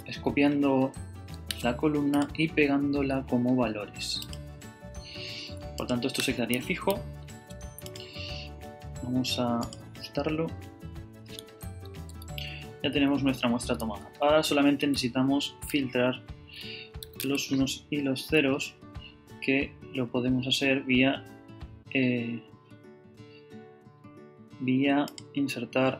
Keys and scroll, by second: 7.1 ⟲, 11.9 super+Right, 12.7 super+Down, 13.0 Left, 14.7 Left, 15.7 shift+super+Down, 17.0 shift+super+c, 17.6 super+c.